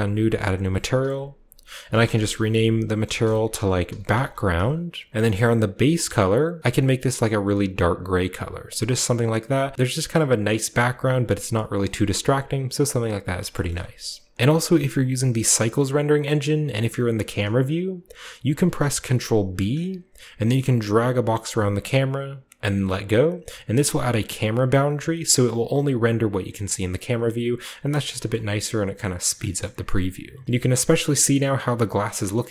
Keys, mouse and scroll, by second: 0.2 click, 1.9-5.1 typing, 5.1 Return, 5.9 click, 7.2-13.1 drag, 12.0 a, 13.1-14.3 scroll up 1, 13.7-14.3 shift+middle drag, 19.5 ctrl+b, 20.9-25.7 ctrl+drag, 23.6-25.7 scroll down 1, 25.8-26.5 scroll up 1, 26.5 scroll down 1, 26.9 scroll up 1, 28.3-29.4 shift+middle drag, 29.6-30.4 shift+middle drag, 30.5-32.5 middle drag, 30.5-31.1 scroll up 1, 31.1-32.5 scroll up 1.